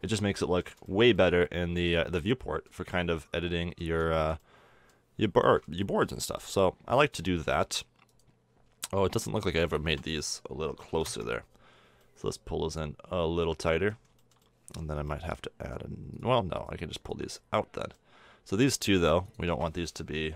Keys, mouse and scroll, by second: 0.0 middle drag, 0.4-0.9 middle drag, 1.2-3.5 middle drag, 5.6 middle click, 6.0 middle click, 6.2 KP_7, 10.0-11.3 drag, 12.0-13.9 middle drag, 14.2-15.4 middle drag, 16.1-20.3 middle drag.